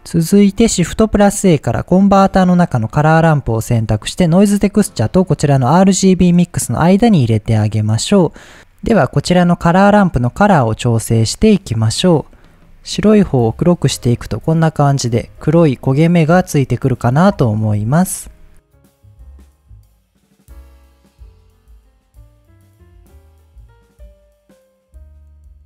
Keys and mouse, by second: 0.8 shift+a, 7.0 click, 7.6 click, 10.7 right click, 11.4 right drag, 14.7 middle click, 16.5-17.1 middle drag, 18.8 click, 19.1 click, 19.4 drag, 19.8-21.7 drag, 23.6 click, 24.2 click, 24.7-25.6 drag.